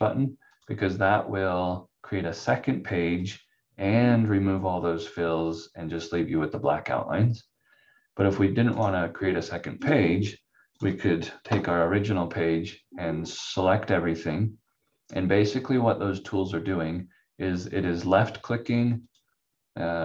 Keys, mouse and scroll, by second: 0.5 click, 8.7 right click, 9.8 click, 11.5 F4, 13.2 click, 19.0 click.